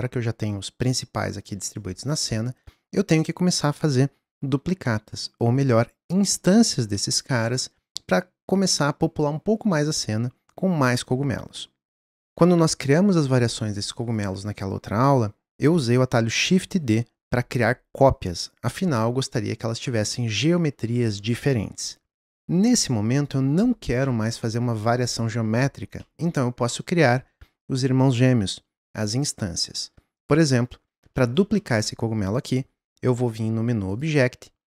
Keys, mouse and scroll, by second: 12.2 scroll up 2, 13.4 click, 14.1 click, 23.2 click, 24.0-30.1 middle drag, 30.1 click, 31.1-31.9 shift+middle drag, 31.9 scroll up 1, 33.9-34.7 drag.